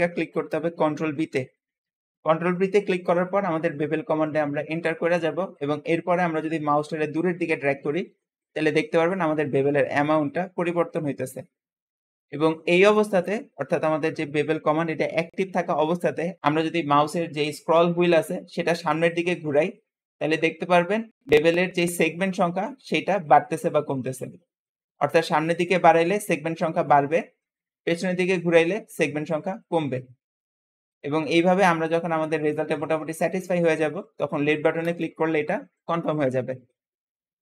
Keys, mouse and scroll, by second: 1.0 ctrl+b.